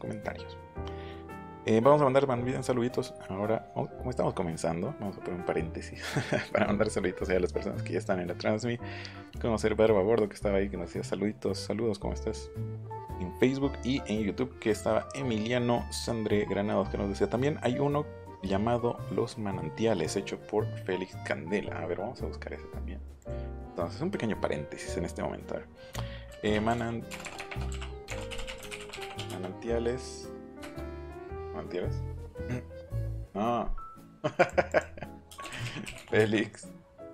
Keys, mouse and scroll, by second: 23.2 click, 26.3-29.7 typing, 30.6 Return, 33.0 click, 34.4 click, 34.6 click, 35.2-37.1 typing.